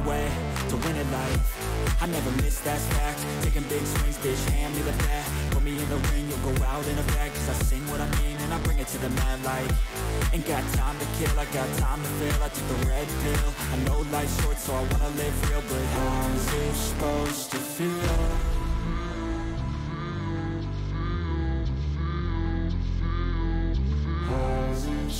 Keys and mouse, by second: 1.6-3.0 drag, 4.0 alt+click, 6.1-7.3 drag, 8.3 alt+click, 10.0-11.3 drag, 12.1 alt+click, 14.3-15.8 drag, 18.0 click, 19.2 click, 20.3 click, 21.2 click, 23.6-24.8 drag.